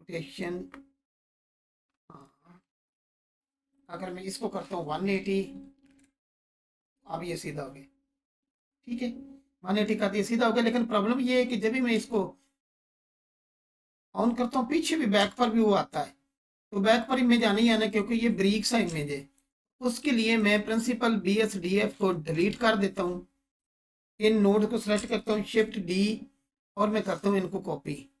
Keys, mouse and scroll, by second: 0.4-2.3 drag, 2.6 ctrl+z, 3.7 click, 4.6 typing, 5.8 Return, 8.4-9.2 scroll down 1, 15.2 space, 17.3-17.9 drag, 18.8-19.5 alt+shift+click, 22.3 Delete, 23.1-23.6 scroll down 2, 23.9-24.5 drag, 24.5-24.9 scroll down 2, 25.3 shift+d, 27.1 click, 27.6-28.2 scroll up 2.